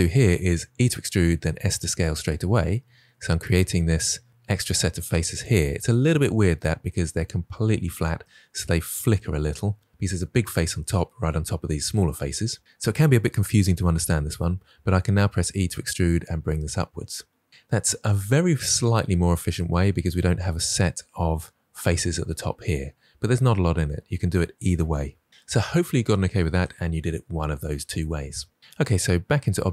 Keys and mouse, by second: 0.6 e, 1.3 s, 5.2 click, 15.1 e, 28.8 Tab.